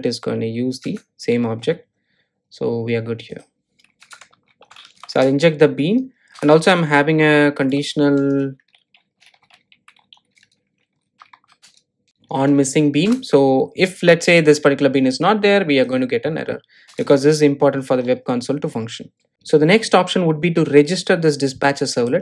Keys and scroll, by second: 5.6 Return, 13.6 Return, 19.3 Delete.